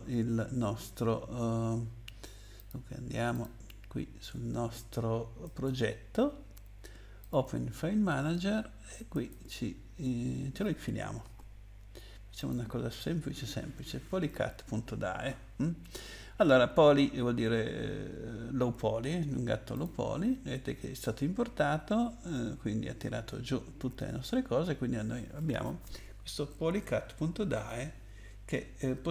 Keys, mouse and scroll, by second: 2.6 click, 3.3 click, 3.6 click, 5.4 right click, 7.2 click, 9.1 right click, 12.4 click, 19.7 click, 27.6 click, 28.8 middle click.